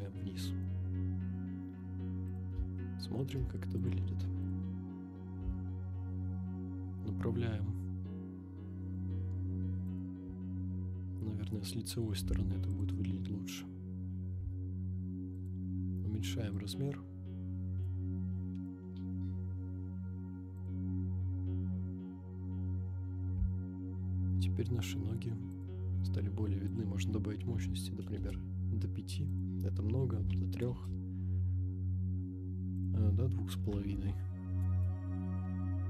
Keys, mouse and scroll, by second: 0.7 KP_0, 2.2 click, 2.8-3.2 shift+middle drag, 3.8-4.6 drag, 5.3 r, 5.4 z, 10.0 click, 10.8 scroll down 1, 11.1-11.5 middle drag, 11.6-12.2 scroll down 3, 12.2 r, 12.2 z, 12.8 click, 13.5 click, 13.8 scroll up 1, 14.3 r, 14.4 z, 15.5 click, 16.5-18.0 drag, 18.9 KP_0, 20.5 click, 20.9 scroll up 2, 23.3 r, 23.4 z, 25.6 click, 26.7-28.3 drag, 29.3-30.8 drag, 32.8-34.8 drag.